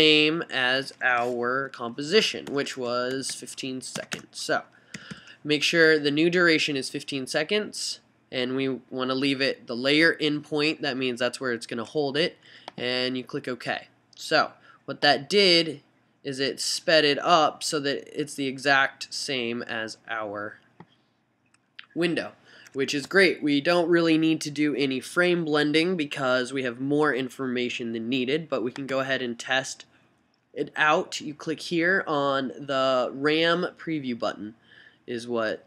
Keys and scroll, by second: 0.2 Right, 1.2 BackSpace, 1.7 1, 3.3-7.9 typing, 4.4 Right.